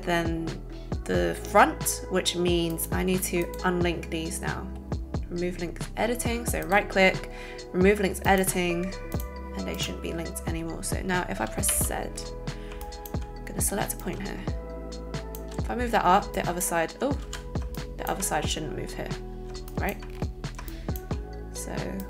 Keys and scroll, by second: 17.2 ctrl+alt+z.